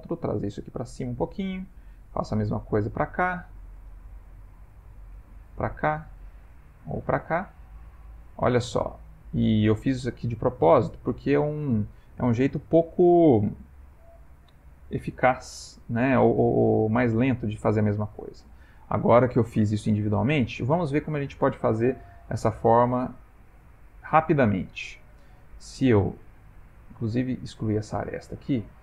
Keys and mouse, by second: 1.8 click, 2.3 e, 4.4 click, 5.2 e, 7.2 click, 7.8 e, 15.8 ctrl+z, 16.0 ctrl+z, 16.4 ctrl+z, 16.6 ctrl+z, 17.0 ctrl+z, 17.3 ctrl+z, 17.7 ctrl+z, 23.0 shift+click, 26.2 x, 27.9 click, 28.6 shift+click.